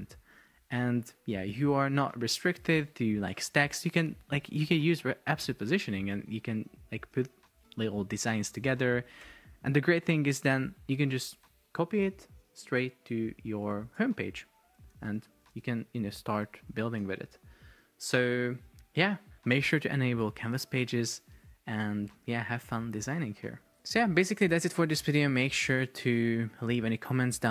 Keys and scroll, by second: 1.9 BackSpace, 9.3 Escape, 11.4 super+c, 13.8 super+v, 15.1 super+x, 15.7 super+v, 17.0 Delete.